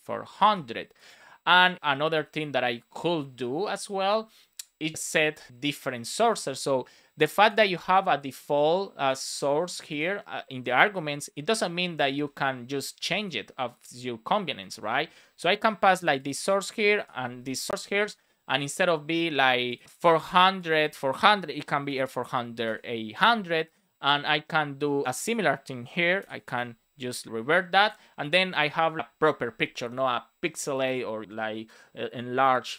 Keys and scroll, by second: 0.3 super+s, 7.5 super+c, 12.0 super+c, 13.8 Return, 14.5 super+v, 16.6 Return, 16.9 super+v, 17.3 super+s, 21.5 BackSpace, 22.6 super+s, 25.8 BackSpace, 26.4 super+s.